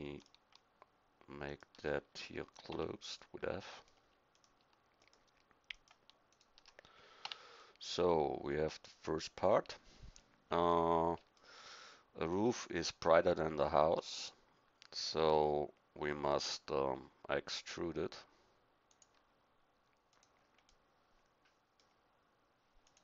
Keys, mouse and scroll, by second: 2.7 f, 7.2 f, 18.9-20.1 drag, 20.7 middle click, 22.8 click.